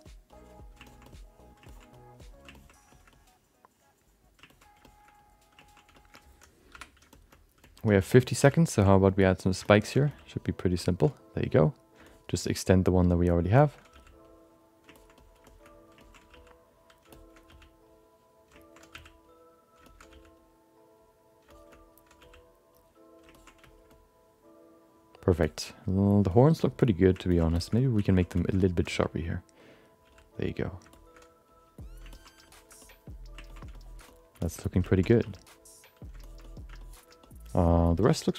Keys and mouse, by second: 0.3 click, 0.8 ctrl+alt+middle click, 1.0 alt+middle click, 1.7 ctrl+alt+middle click, 2.0 alt+middle click, 2.5 ctrl+alt+middle click, 2.9 alt+shift+middle click, 3.1-4.2 alt+middle drag, 4.5 ctrl+alt+middle click, 4.8 alt+shift+middle click, 5.2 alt+middle click, 5.6 ctrl+alt+middle click, 6.0 shift+middle click, 6.7 5, 7.1 shift+middle click, 7.3 alt+middle click, 7.6 middle click, 8.0 f, 8.3 f, 8.7 f, 9.1 click, 9.6 alt+shift+middle click, 10.0 f, 10.3 click, 10.8 alt+shift+middle click, 11.4 click, 12.0 alt+shift+middle click, 12.9 click, 13.6 alt+shift+middle click, 13.9 f, 14.2 click, 14.9 ctrl+middle click, 15.2 alt+middle click, 15.4 shift+middle click, 15.6 alt+middle click, 16.0 ctrl+alt+middle click, 16.4 f, 16.7 click, 17.1 alt+shift+middle click, 17.4 f, 17.9 click, 18.9 f, 19.2 click, 19.9 middle click, 20.1 f, 20.4 click, 21.0 click, 21.5 alt+shift+middle click, 21.7 middle click, 22.2 f, 22.7 click, 23.3 ctrl+alt+middle click, 23.6 middle click, 23.9-25.2 alt+middle drag, 25.4 alt+shift+middle click, 26.0 alt+shift+middle click, 26.3 alt+middle click, 26.6 shift+middle click, 26.8 alt+middle click, 27.5 alt+shift+middle click, 27.7 middle click, 28.0 ctrl+alt+middle click, 28.3 alt+shift+middle click, 28.6 alt+middle click, 28.9 f, 29.2 click, 30.0 f, 30.3 click, 30.9 alt+shift+middle click, 31.5 click, 32.1 ctrl+alt+middle click, 32.5 shift+middle click, 32.8 alt+middle click, 33.5 alt+middle click, 33.7 alt+shift+middle click, 34.1 middle click, 34.4 middle click, 34.6 middle click, 34.8 ctrl+alt+middle click, 35.2 f, 35.6 click, 36.2 ctrl+alt+middle click, 36.4 middle click, 36.8 alt+shift+middle click, 37.2 middle click, 38.0 alt+shift+middle click.